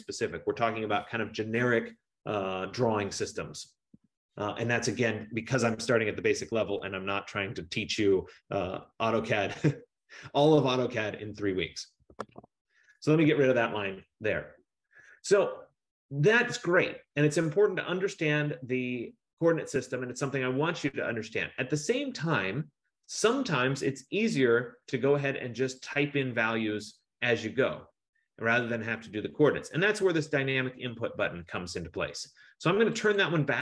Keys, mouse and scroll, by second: 11.9-12.9 typing, 13.6 Return, 19.4-22.4 scroll, 22.4 F15, 33.2 click.